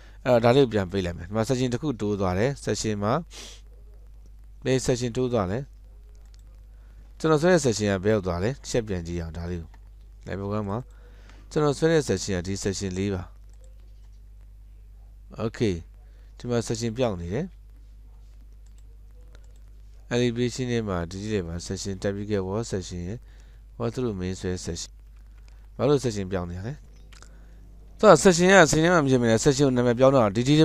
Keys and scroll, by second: 25.2 alt+a, 25.2 alt+a, 27.2 ctrl+z, 27.2 Escape.